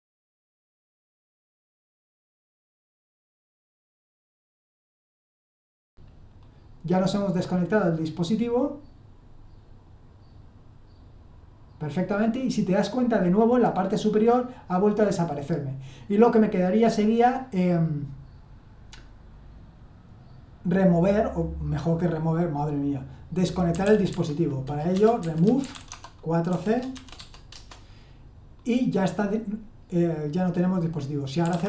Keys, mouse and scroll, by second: 0.6-5.0 typing, 2.2 Tab, 2.7 Tab, 5.2 Tab, 5.5 Return, 23.7-26.9 typing, 27.2 Tab, 27.5 Return, 31.2-31.6 typing.